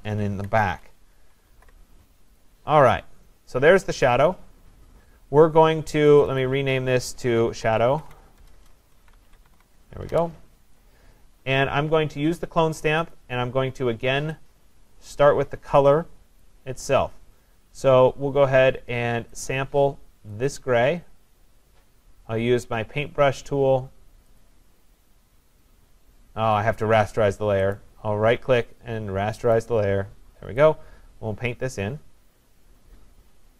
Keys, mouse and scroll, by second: 0.8 ctrl+=, 1.2 ctrl+=, 1.6 ctrl+=, 4.0 click, 6.2 click, 6.4-7.9 click, 7.7-10.1 typing, 10.1 Return, 13.2 click, 16.1 click, 16.4 click, 19.5 click, 20.6 click, 24.5 click, 27.8 right click, 30.6 click.